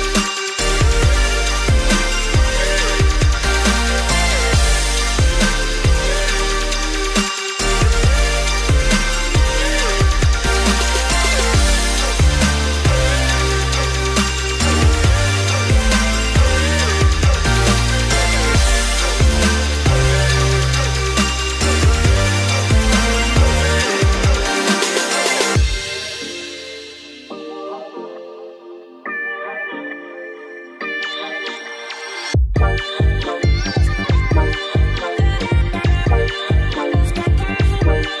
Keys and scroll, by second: 1.6-4.2 typing, 8.5 Right, 8.7 Right, 35.3-36.1 typing.